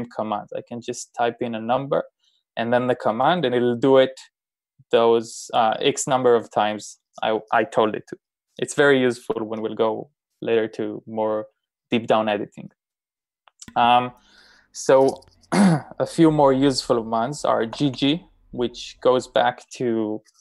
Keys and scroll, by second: 17.7 typing.